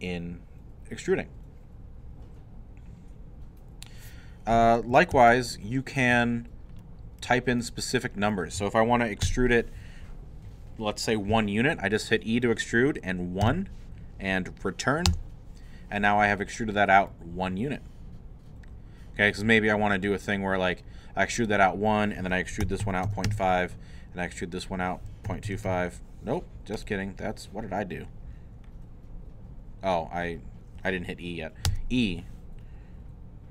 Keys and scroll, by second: 5.1 ctrl+z, 6.1 ctrl+alt+z, 9.2 e, 13.4 l, 15.1 Return, 22.4-23.5 typing, 25.0-26.1 typing, 31.7 e.